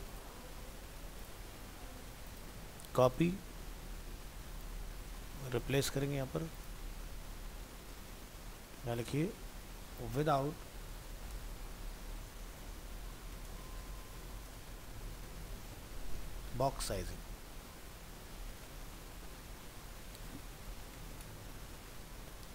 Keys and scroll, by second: 2.6 ctrl+c, 5.7 ctrl+v.